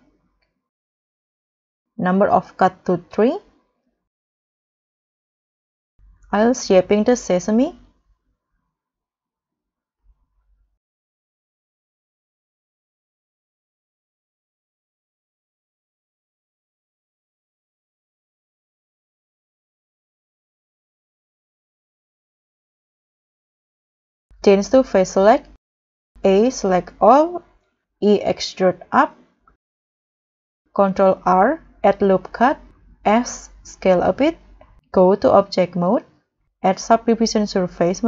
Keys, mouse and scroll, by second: 0.7 middle click, 3.0 double click, 5.8 middle click, 5.8-6.2 scroll down 2, 6.2 middle click, 6.2 middle click, 7.2 7, 7.5 7, 7.5 scroll down 4, 7.7-8.0 scroll up 1, 8.6 double click, 9.1-11.6 typing, 10.7 Escape, 10.9 double click, 12.2 middle click, 12.2 middle click, 12.4 scroll up 4, 12.5 middle click, 12.5 scroll down 8, 12.6 scroll up 8, 13.0 middle click, 13.1 7, 13.4 scroll up 1, 14.0 double click, 14.0 double click, 14.7 s, 14.8-15.4 scroll down 3, 15.5 scroll down 4, 15.6 scroll up 2, 16.0 s, 16.5 double click, 16.9 s, 17.2 scroll up 1, 17.5 w, 17.5 s, 17.7-18.4 scroll up 6, 18.4 ctrl+r, 19.2 ctrl+r, 19.3 right click, 19.6 s, 20.1 g, 20.4 y, 20.9 scroll down 1, 20.9 scroll up 1, 21.0 double click, 21.7 e, 22.1 y, 22.5 s, 22.7 Escape, 23.3 s, 24.0 middle click, 24.1-24.5 scroll up 3, 24.2 middle click, 25.5 scroll down 2, 25.7 scroll up 1, 26.2 a, 27.9 e, 30.1 middle click, 30.3 middle click, 30.4-31.0 scroll up 5, 31.0 ctrl+r, 31.3 ctrl+r, 31.9 right click, 33.0 s, 35.5 double click.